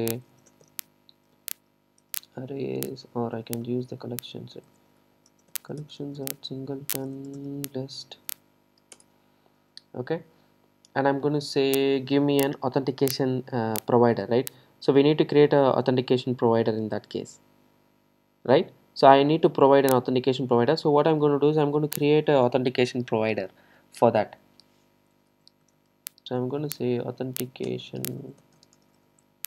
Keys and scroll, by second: 9.1 Return.